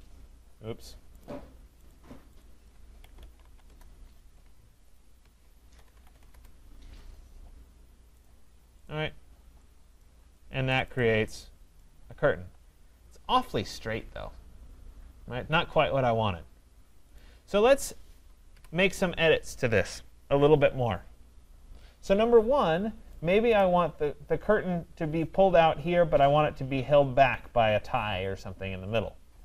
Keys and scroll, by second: 18.5 Delete.